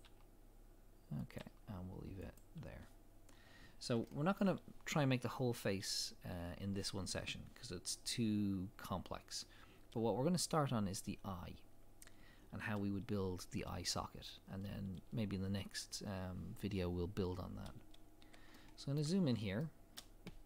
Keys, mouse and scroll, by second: 3.6 scroll down 1, 4.1 shift+middle click, 17.9 scroll up 1, 18.5 shift+middle click, 19.2 scroll up 1, 19.6 shift+middle click, 20.2 scroll up 1.